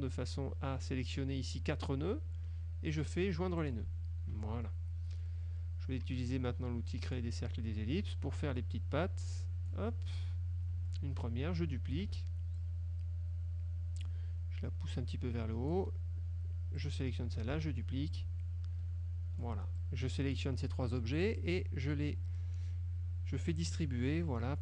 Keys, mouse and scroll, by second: 3.7 click, 4.4 F1, 7.2 click, 8.5-10.0 drag, 10.8 F1, 12.1 ctrl+d, 12.6-14.3 ctrl+drag, 15.0 click, 16.8 click, 17.6 ctrl+d, 18.2-19.8 ctrl+drag, 19.9-20.7 ctrl+drag.